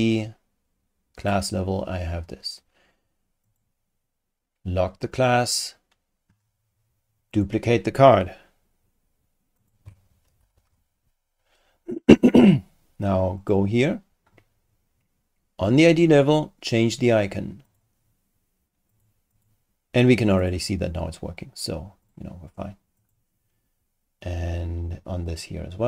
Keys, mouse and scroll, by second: 1.2 click, 3.4 click, 5.1 click, 7.3 click, 9.6 ctrl+click, 10.4 ctrl+shift+d, 13.4 click, 15.7 click, 17.7 click, 18.9 click, 19.3 click, 20.4 click, 22.0 click, 23.0 click, 25.3 click.